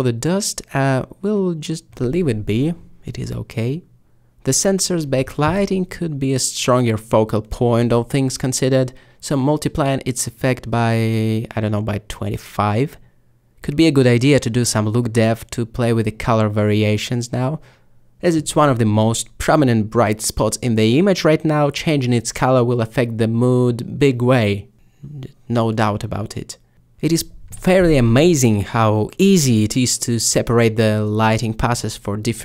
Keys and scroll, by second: 1.4 2, 2.4-3.1 typing, 7.4 5, 9.2 typing, 10.5-11.3 typing, 12.5 a, 30.9 typing.